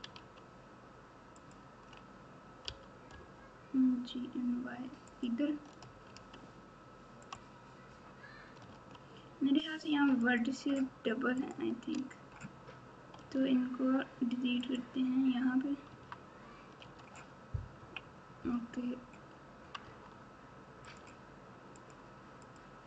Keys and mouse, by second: 0.1 alt+z, 2.6 g, 6.0 alt+z, 7.2 click, 8.7 alt+z, 10.2 shift+click, 11.3 shift+click, 13.1 x, 15.9 Tab, 16.8 alt+z, 17.7 KP_1, 19.8 Tab, 20.9 click, 22.4 click.